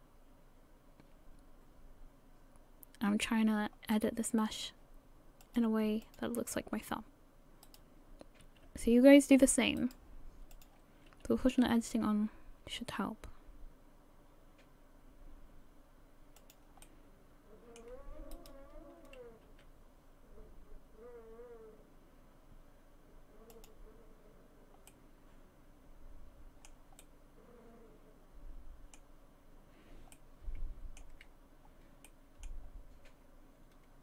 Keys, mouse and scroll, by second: 3.9 middle click, 5.4 click, 6.0 click, 7.7 right click, 8.7 g, 10.5 click, 11.6 g, 16.8 middle click, 18.3 right click, 19.4 g, 24.9 middle click, 27.0 middle click, 30.1 middle click, 31.5-32.1 scroll up 1, 32.1 middle click.